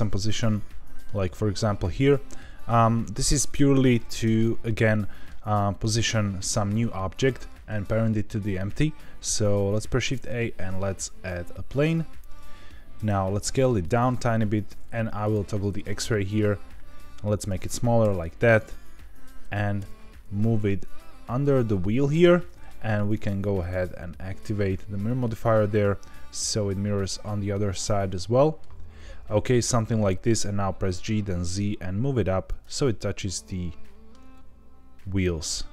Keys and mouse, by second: 0.4-1.0 middle drag, 3.5 click, 4.2 KP_Decimal, 4.9-5.3 middle drag, 9.8 shift+a, 12.9 Tab, 13.6 s, 13.8 click, 14.1 z, 14.7 Escape, 14.7 z, 15.3 click, 16.0 s, 17.3 click, 18.0 KP_7, 19.7 g, 21.6 click, 23.7-25.1 drag, 27.0-28.5 middle drag, 29.7 Tab, 30.9 g, 31.0 z, 32.5 drag, 32.9-34.1 middle drag, 34.4 g, 34.4 z.